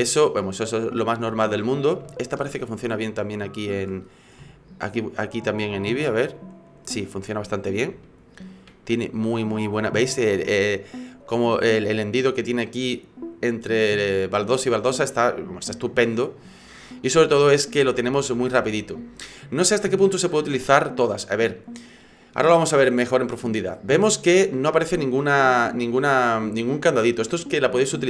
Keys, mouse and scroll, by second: 0.5-1.0 scroll down 3, 1.0 right click, 1.8 right click, 2.1 shift+middle click, 3.0 click, 4.1-4.4 scroll up 4, 4.4 middle click, 5.8 shift+middle click, 7.1-7.4 scroll down 2, 7.5-7.9 scroll up 2, 8.0 shift+middle click, 14.7 shift+middle click.